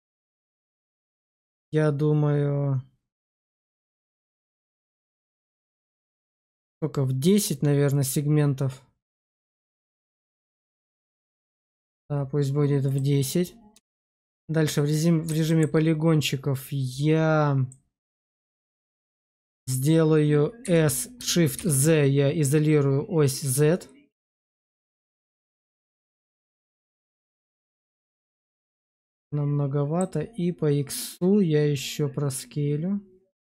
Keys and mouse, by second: 12.7 click, 13.6 Tab, 14.6 middle click, 15.3 shift+middle click, 17.6 click, 18.7 shift+click, 20.5 s, 21.4 shift+z, 28.7 click, 29.1 middle click, 31.0 click, 31.2-33.5 drag.